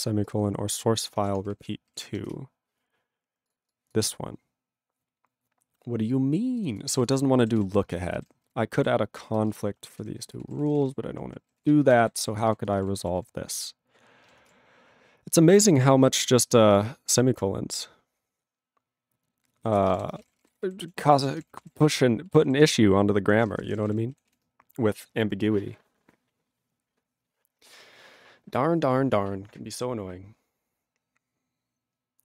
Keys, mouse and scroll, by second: 1.3 Return, 1.6 ctrl+r, 2.3 Return, 3.5 click, 3.5 click, 3.7 click, 3.9 click, 6.6 click, 6.6 click, 6.7 double click, 6.8 double click, 7.0 click, 7.0 click, 7.5 ctrl+s, 7.8 ctrl+space, 8.3 ctrl+alt+b, 8.8 ctrl+g, 9.3 ctrl+space, 9.4 ctrl+e, 9.5 ctrl+g, 10.0 ctrl+s, 10.2 ctrl+a, 10.4 ctrl+space, 10.4 ctrl+e, 10.5 ctrl+n, 10.6 ctrl+e, 10.6 ctrl+n, 10.7 ctrl+e, 10.8 ctrl+g, 11.1 ctrl+p, 11.6 ctrl+s, 11.7 ctrl+space, 12.1 ctrl+alt+b, 12.5 ctrl+g, 12.7 ctrl+space, 12.7 ctrl+e, 12.8 ctrl+g, 13.2 ctrl+s, 16.9 ctrl+s, 19.6 ctrl+a, 19.8 ctrl+space, 19.8 ctrl+e, 19.9 ctrl+g, 20.1 ctrl+space, 20.2 ctrl+a, 20.3 ctrl+p, 20.4 ctrl+g, 20.4 ctrl+e, 20.6 ctrl+n, 21.0 ctrl+s, 21.1 ctrl+e, 21.2 ctrl+space, 21.3 ctrl+a, 21.4 ctrl+p, 21.6 ctrl+g, 21.6 ctrl+e, 21.7 ctrl+n, 22.2 ctrl+e, 22.6 ctrl+s, 23.2 ctrl+p, 23.3 ctrl+a, 23.3 ctrl+p, 23.5 ctrl+space, 23.5 ctrl+e, 23.5 ctrl+n, 23.7 ctrl+e, 23.8 ctrl+n, 23.8 ctrl+e, 23.9 ctrl+g, 24.3 ctrl+s.